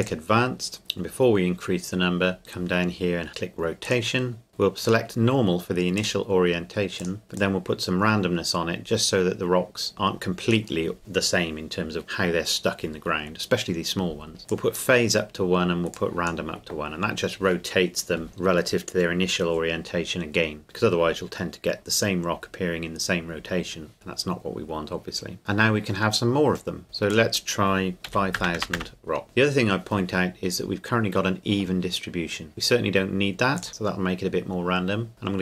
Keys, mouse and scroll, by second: 0.0 click, 2.2-3.5 scroll down 1, 3.9 click, 4.9 click, 14.5 click, 24.4 scroll down 1, 24.7 scroll up 1, 24.7 scroll down 1, 24.9-25.4 scroll up 1, 25.4 click, 27.1 click, 28.1 KP_5, 28.4 KP_0, 29.2 KP_Enter, 30.5-32.4 scroll up 2, 33.6 click.